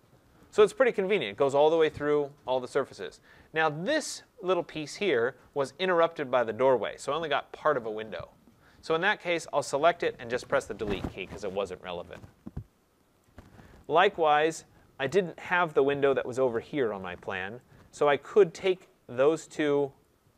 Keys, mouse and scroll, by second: 0.3 right click, 0.6-0.9 scroll, 2.9 right click, 3.2-5.4 scroll, 5.5 click, 10.3 Delete, 12.5 middle click, 12.7 middle click, 13.8 right click, 15.0 right click, 17.9 right click, 20.0 click.